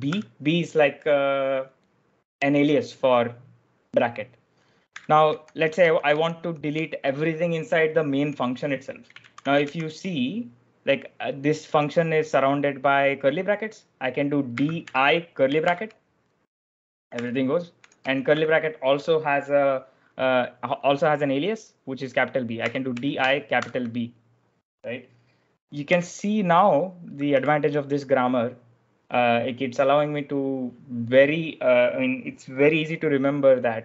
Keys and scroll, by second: 0.0 b, 4.6-6.2 typing, 8.0 j, 9.1 shift+v, 9.5 shift+v, 14.2-15.5 typing, 17.0-18.7 typing, 22.2-23.5 typing, 25.8 u, 27.2 w.